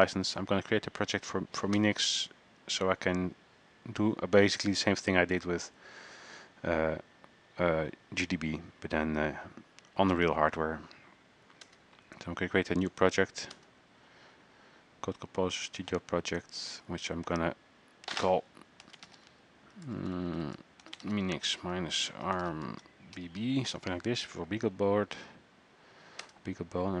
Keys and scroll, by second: 18.8-23.4 typing.